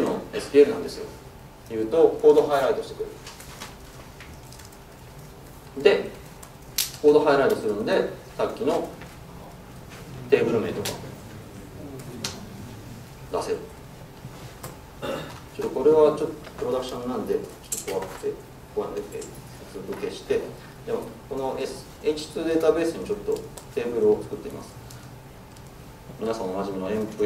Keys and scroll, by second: 7.8 ctrl+space, 12.3 Return, 25.2 Tab.